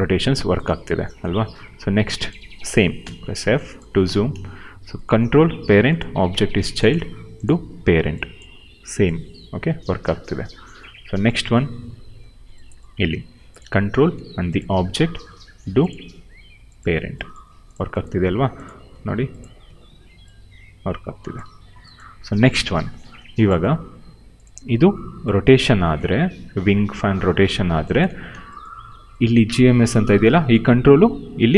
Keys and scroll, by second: 0.6 ctrl+z, 2.9 f, 3.9 w, 8.4 e, 10.0 ctrl+z, 13.9 q, 21.3 ctrl+z, 24.6 e, 28.0 ctrl+z.